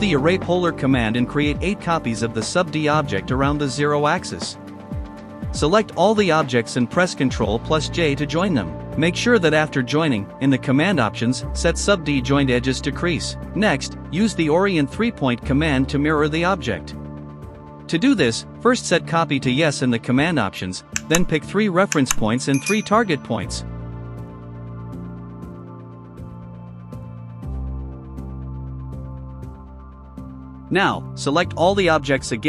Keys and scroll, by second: 0.6 space, 1.7 KP_0, 1.8 Return, 2.6 KP_8, 2.8 Return, 7.7 ctrl+j, 11.3 space, 13.6-15.6 typing, 29.2 Escape, 30.4 shift+c, 31.5 ctrl+j, 32.2 space.